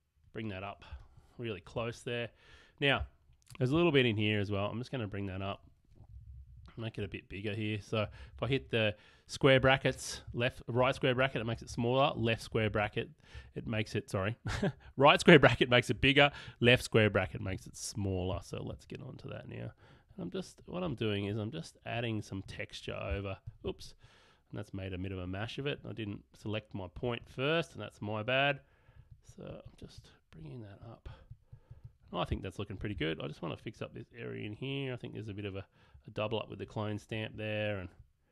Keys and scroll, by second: 1.0 space, 6.0 \, 8.1 ], 10.2-12.5 typing, 14.5 ], 16.0 [, 18.4 alt+[.